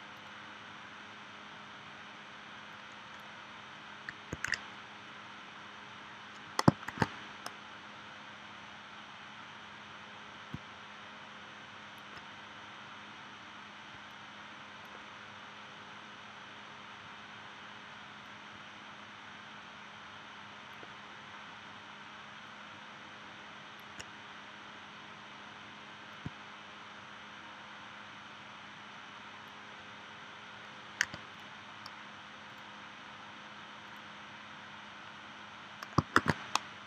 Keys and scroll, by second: 4.3 super+z, 6.9 shift+w, 31.0 v, 36.2 shift+w.